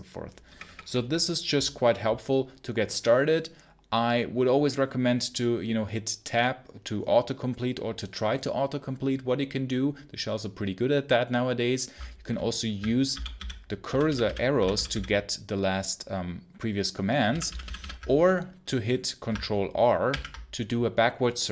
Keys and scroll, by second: 0.3 BackSpace, 0.5 BackSpace, 13.0 Up, 13.2 Up, 13.7 Down, 14.4 Up, 17.1 Down, 20.0 ctrl+r.